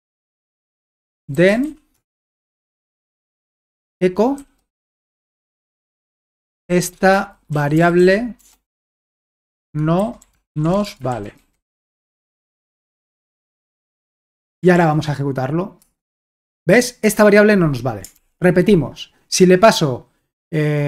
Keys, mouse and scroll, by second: 0.8-2.9 typing, 3.6 Return, 4.1-12.9 typing, 14.0-15.9 typing, 18.2 ctrl+l.